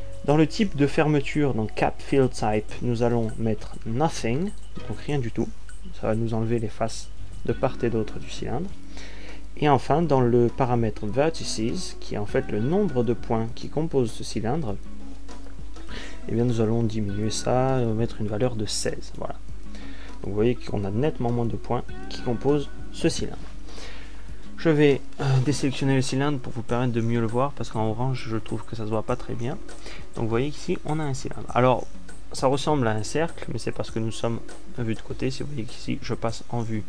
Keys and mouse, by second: 4.5 click, 27.3 a.